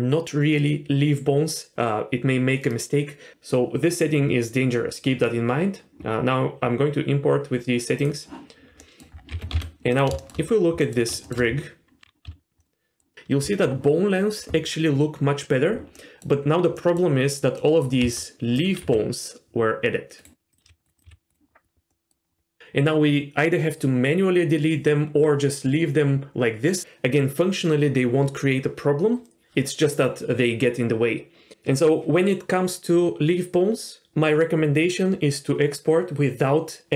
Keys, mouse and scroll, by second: 8.8 middle click, 9.1 scroll down 1, 9.3 g, 10.2 shift+middle click, 10.5-10.8 scroll up 1, 10.8 middle click, 11.2 shift+middle click, 11.5-12.2 scroll up 1, 12.2 z, 12.6-13.0 middle drag, 15.9 middle drag, 16.7 middle drag, 17.2-17.6 scroll up 1, 17.6 middle drag, 18.0 Tab, 18.5 click, 18.8 g, 20.5 click, 20.6 g, 21.0 click, 21.9 middle click, 22.2 scroll down 1.